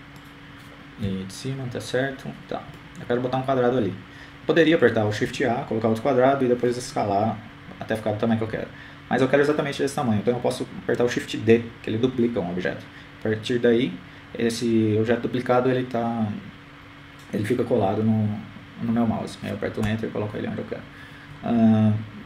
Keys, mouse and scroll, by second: 0.6 ctrl+KP_3, 2.5-3.6 drag, 4.1-5.3 drag, 5.1 KP_7, 6.7-8.4 middle drag, 9.3 shift+a, 16.2 shift+d.